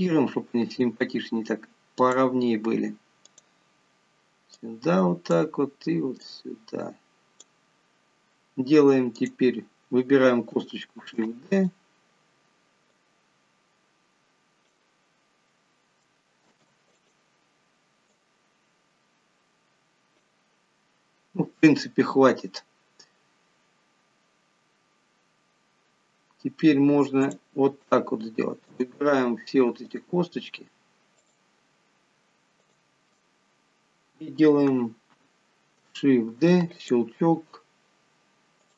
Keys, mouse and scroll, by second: 0.9 click, 3.5 click, 4.9 click, 6.6 click, 9.5 click, 11.3 shift+d, 13.3 click, 15.5 scroll down 2, 16.9 shift+d, 18.4 click, 26.1 scroll up 3, 26.7 scroll down 2, 27.6 click, 29.1 shift+click, 30.2 click, 31.5 shift+click, 33.0 shift+click, 33.7-34.1 scroll down 3, 36.8 shift+d.